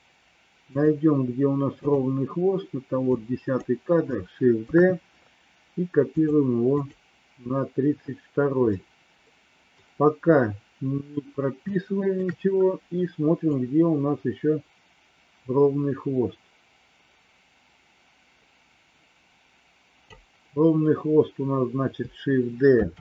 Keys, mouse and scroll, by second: 0.7 click, 1.7 click, 3.0 click, 4.6 shift+d, 6.8 click, 8.7-9.8 middle drag, 11.7 shift+middle click, 13.4-20.1 drag, 22.7 shift+d.